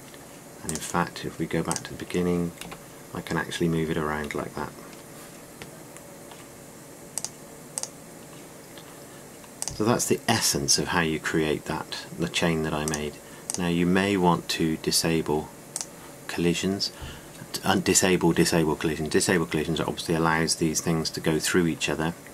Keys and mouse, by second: 3.5 g, 8.1-10.8 drag, 12.3 click, 13.8-20.7 drag, 20.7-22.3 middle drag.